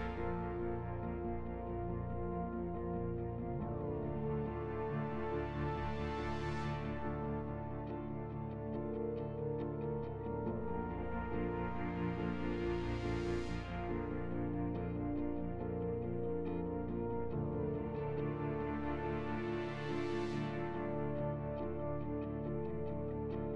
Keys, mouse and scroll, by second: 0.2 shift+middle click, 0.2 scroll down 1, 0.3 scroll up 2, 0.3 shift+middle click, 0.4 shift+middle click, 3.0 click, 3.0 g, 4.3 g, 4.9 click, 4.9 scroll down 5, 5.1-9.7 shift+middle drag, 9.4 scroll up 2, 9.6 alt+shift+right click, 9.7 shift+right click, 9.7 e, 10.4-13.2 shift+middle drag, 10.4 click, 10.5 scroll down 1, 13.2 right click, 13.2 scroll up 1, 13.3-19.3 middle drag, 18.1 right click, 18.1-19.3 scroll down 1, 18.1 2, 18.1 f, 19.3 scroll down 2, 19.3 f, 19.4 middle click, 20.2 click, 20.2 right click, 20.2 g, 20.2 y, 20.4 right click, 20.4 click, 20.4 right click, 23.0 click, 23.0 right click, 23.0-23.5 typing, 23.2 ctrl+z, 23.2 middle click, 23.2 shift+right click, 23.2 scroll down 2.